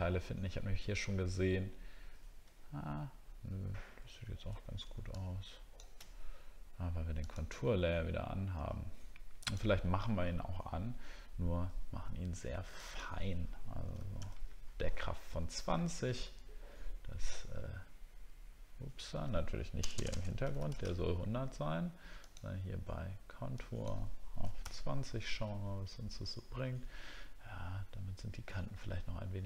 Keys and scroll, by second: 0.7 alt+scroll up 1, 1.5 alt+scroll up 1, 4.1 alt+scroll down 1.